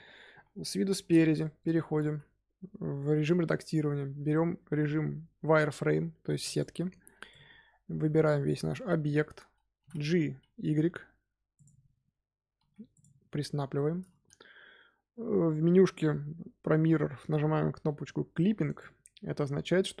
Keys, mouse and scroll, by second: 0.2 KP_3, 0.9-1.3 scroll up 1, 1.3-1.8 shift+middle drag, 1.8 Tab, 1.9 z, 4.6 z, 7.2 click, 8.5-9.7 scroll up 2, 9.7 g, 12.4 g, 18.6 click.